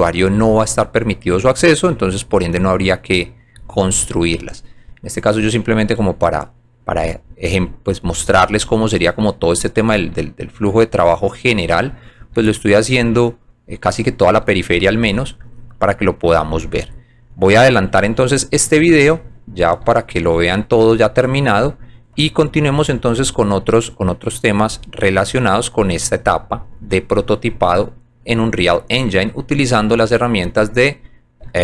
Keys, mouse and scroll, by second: 0.6 alt+click, 2.2 alt+click, 3.9 alt+click, 4.4 alt+middle click, 5.1 alt+middle click, 6.1 alt+click, 6.8-8.6 drag, 8.9 alt+middle click, 9.9 alt+middle click, 10.2 alt+click, 11.0 alt+middle click, 12.4 alt+middle click, 13.2 alt+click, 13.8 alt+middle click, 15.0 alt+click, 16.3-17.8 drag, 18.7 alt+click, 19.2 alt+middle click, 20.0 alt+scroll up 1, 20.8 alt+click, 21.3 alt+middle click, 23.1 alt+click, 24.6 click, 26.6 click, 27.1 scroll down 1, 27.7 alt+middle click, 28.4 alt+middle click, 29.3 alt+click, 29.9 alt+middle click, 30.8 alt+click.